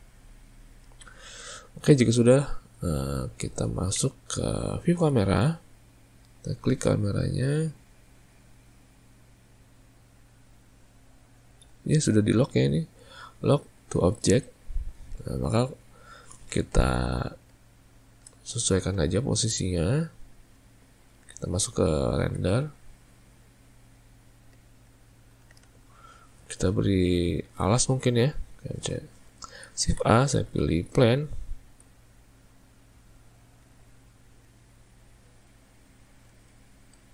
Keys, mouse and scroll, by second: 1.0 alt+a, 4.1 `, 6.2 click, 11.2 click, 11.8 click, 17.6-21.6 ctrl+middle drag, 21.6 z, 24.7-27.6 ctrl+middle drag, 27.6 alt+a, 29.9 shift+a, 31.9 s, 34.1-37.1 middle drag.